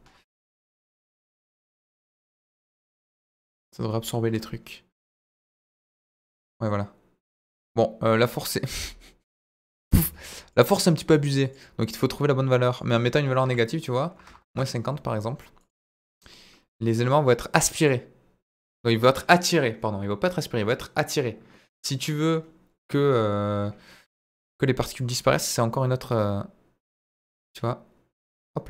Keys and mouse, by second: 1.7-5.0 drag, 5.8-10.5 drag, 12.8-14.8 drag, 15.5 click, 17.9 drag, 18.5-24.1 drag, 24.9-28.6 drag.